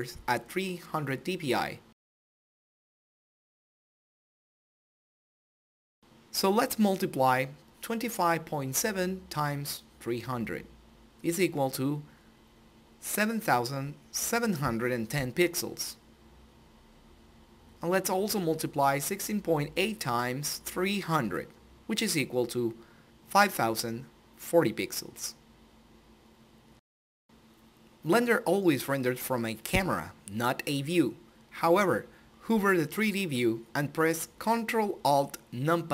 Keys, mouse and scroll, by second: 1.9 click, 13.0 click, 16.1 Tab, 18.5 click, 24.5 click, 32.5 click.